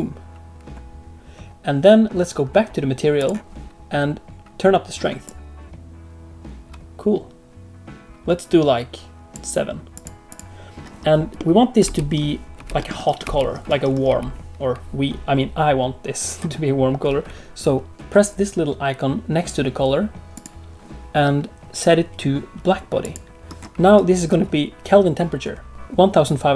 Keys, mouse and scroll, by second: 3.1 click, 5.2 click, 9.9 click, 10.2 click, 11.3 middle click, 11.8 space, 12.5 space, 12.7 middle click, 13.2 space, 14.0 space, 20.3 click, 25.7 click.